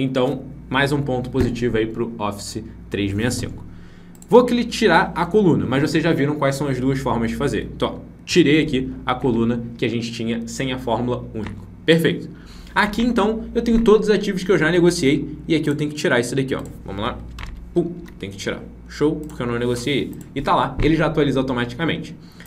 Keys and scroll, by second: 8.2 ctrl+-, 17.9 ctrl+-.